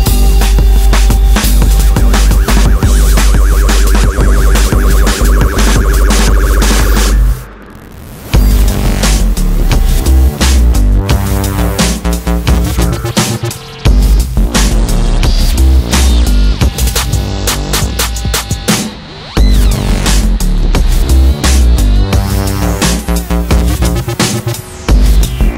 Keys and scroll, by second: 2.4 space, 8.7 Escape, 18.7 Return.